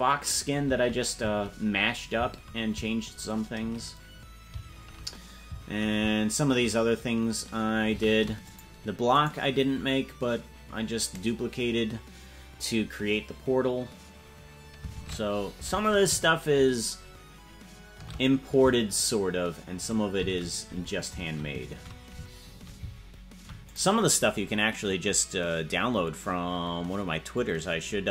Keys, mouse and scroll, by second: 9.3-14.1 right drag, 14.9 shift+`.